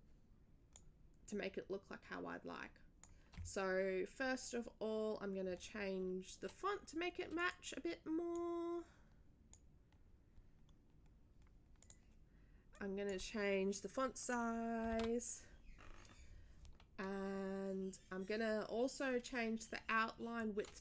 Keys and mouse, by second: 0.7-3.1 drag, 7.3 click, 8.3-9.5 drag, 11.8 click, 12.7 click, 13.2 click, 20.4 click.